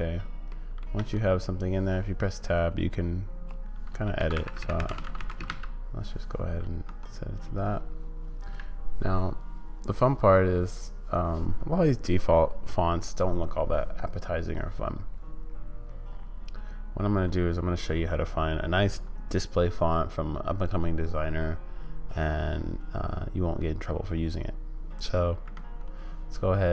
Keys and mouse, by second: 0.6 middle click, 1.0 Tab, 2.7-5.5 typing, 6.8 Tab.